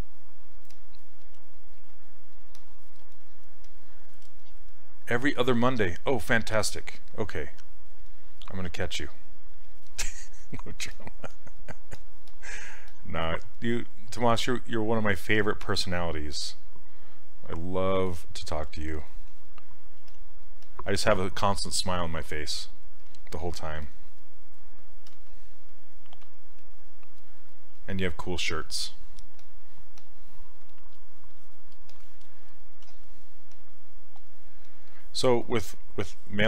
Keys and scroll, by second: 1.3 s, 14.2 s, 20.0 s, 25.1 s, 32.9 s.